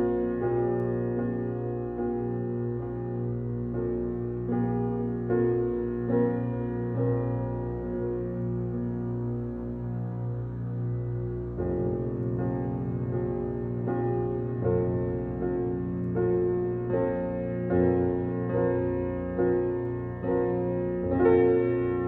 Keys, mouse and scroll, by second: 8.1-9.2 scroll up 1, 9.2 click, 17.6-19.2 scroll up 1.